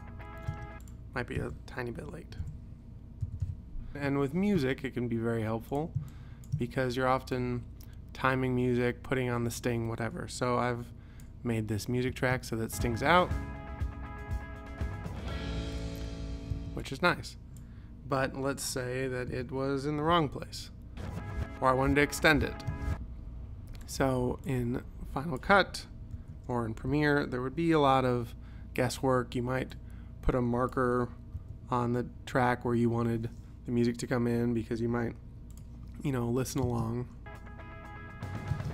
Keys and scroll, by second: 0.6 space, 1.4 u, 2.5 p, 3.3 ,, 12.2 space, 16.6 space, 18.3 u, 19.4 p, 20.2 j, 22.8 space, 26.2 u, 27.0 p, 31.4 ;, 36.7 space, 38.6 space.